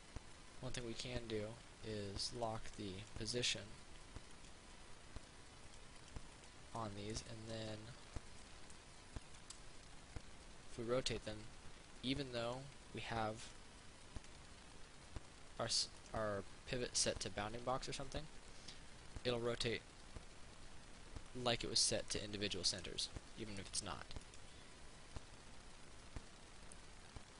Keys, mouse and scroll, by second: 0.0 right click, 2.6 click, 4.6-5.6 right drag, 5.9 click, 7.0 middle click, 9.4 shift+right click, 10.0 shift+r, 12.7 right click, 13.6 click, 16.2 right click, 17.8 r, 21.7 right click, 22.4 middle click, 24.5 right click, 25.4-27.3 drag.